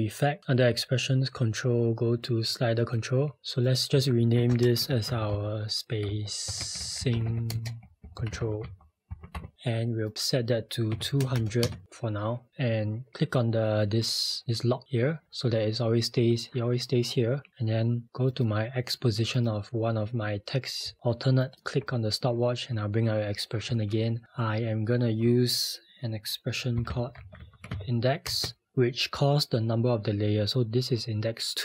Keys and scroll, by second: 4.5 Return, 5.1-7.7 typing, 10.9-11.2 typing, 11.6 Return, 28.3 x.